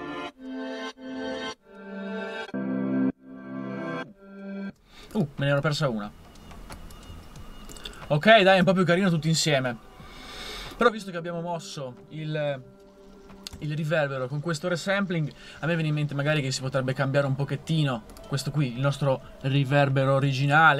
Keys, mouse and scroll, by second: 4.7 space, 13.6 a.